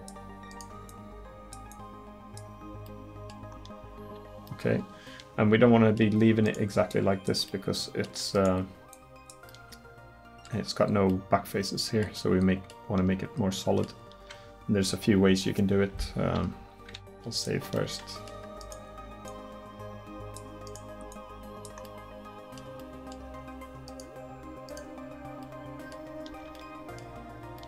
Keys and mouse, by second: 2.7 middle click, 7.5-9.6 middle drag, 10.3 middle click, 17.0 ctrl+s, 26.3 Tab.